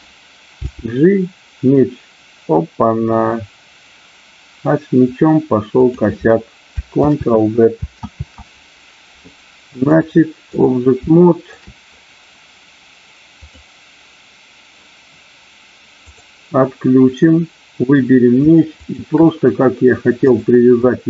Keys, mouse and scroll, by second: 0.6 g, 5.8 click, 8.3 ctrl+z, 9.8 ctrl+z, 9.8 click, 11.0 shift+middle click, 20.2 click.